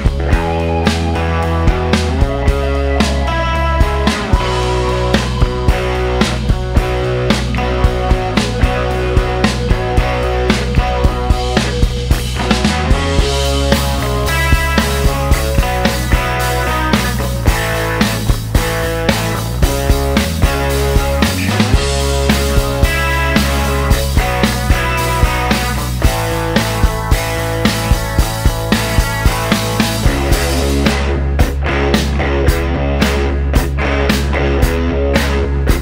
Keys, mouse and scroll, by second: 1.7 click, 3.2 click, 3.9 shift+o, 5.4 middle click, 7.3 click, 9.7 click, 10.2 middle click, 11.9 click, 12.3 right click, 13.3 click, 14.2 click, 14.9 shift+o, 16.3 scroll down 2, 16.6-17.2 middle drag, 17.2-17.5 scroll up 2, 18.8 click, 19.5 click, 20.1 shift+o, 21.2-22.2 shift+scroll up 5, 23.1 click, 24.5 click, 25.3 shift+o, 26.1-26.5 shift+scroll down 2, 26.8 middle click, 27.7-28.1 scroll up 2, 28.3 middle click, 28.6-28.9 scroll up 1, 28.9 middle click, 30.6 click, 32.1 click, 33.2 a, 34.6-35.5 typing.